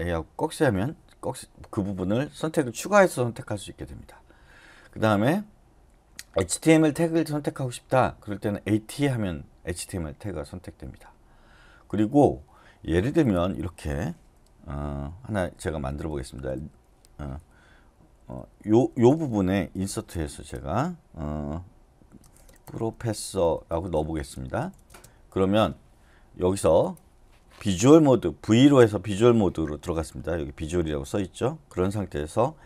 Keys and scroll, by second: 15.3-16.5 typing, 18.4-20.3 typing, 22.1-24.0 typing, 28.4 v.